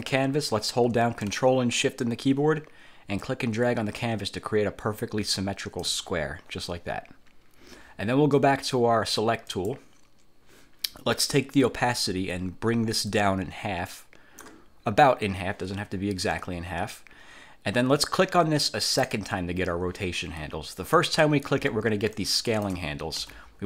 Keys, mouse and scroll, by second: 3.4-6.1 ctrl+shift+drag, 9.6 click, 13.2-14.8 drag, 16.4 click, 19.0 click, 21.1 click, 22.3 ctrl+shift+click, 23.3 ctrl+shift+z.